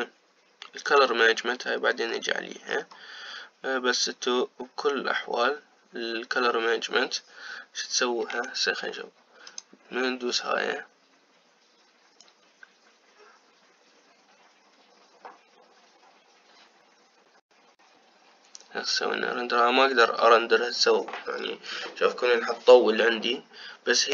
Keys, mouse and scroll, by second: 1.7 click, 2.4-3.5 scroll down 6, 3.5-5.0 scroll down 4, 9.1 z.